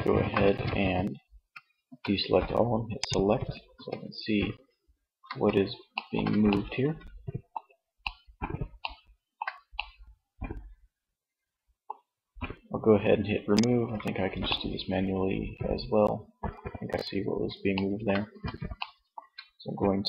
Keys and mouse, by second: 0.4 a, 0.8 a, 2.0-3.2 drag, 2.7 z, 4.2 z, 9.2 middle click, 13.6 middle click, 14.7 middle click, 16.7 middle click, 17.5 z, 19.9 click.